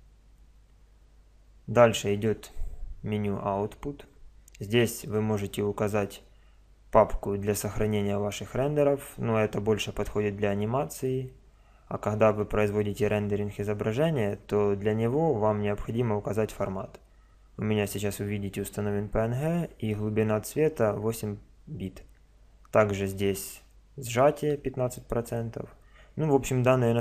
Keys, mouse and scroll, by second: 0.0 Escape, 3.1 middle click, 3.4-4.0 middle drag.